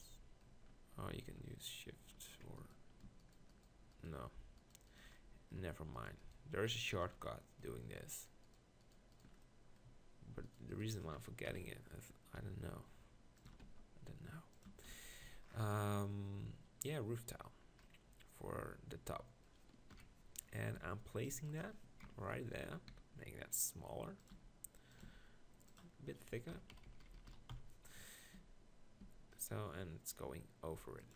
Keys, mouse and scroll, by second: 9.1 middle click, 11.5 KP_1, 12.4 e, 13.5 s, 14.7 Tab, 14.9 z, 15.2 z, 20.0 KP_1, 20.8 g, 22.1 ctrl+KP_Decimal, 22.9 s, 24.3 g, 25.1 s, 26.6 KP_1, 26.7-27.6 KP_4, 28.4 g, 29.0 g.